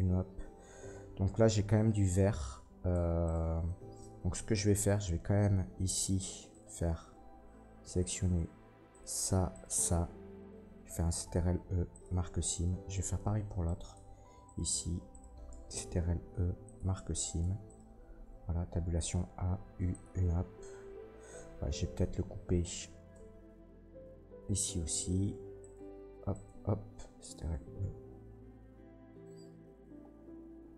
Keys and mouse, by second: 2.9 Tab, 2.9-9.2 drag, 3.2 middle click, 3.2 right click, 4.3 Tab, 6.5 middle click, 6.5 right click, 8.9 middle click, 8.9 right click, 9.5 ctrl+click, 9.5 ctrl+middle click, 9.5 ctrl+right click, 9.7-13.6 ctrl+drag, 11.0 ctrl+e, 12.6 Tab, 13.6 middle click, 13.7 click, 13.9 Tab, 14.4 middle click, 15.1 shift+middle click, 15.9 ctrl+e, 17.4 Tab, 17.6 middle click, 18.2 Tab, 18.5 a, 19.4 u, 22.6-23.8 drag, 23.1 Tab, 25.0 Tab, 25.5 middle click, 26.3 ctrl+click, 26.3 ctrl+middle click, 26.3 ctrl+right click, 27.3 ctrl+e, 30.4-30.7 drag.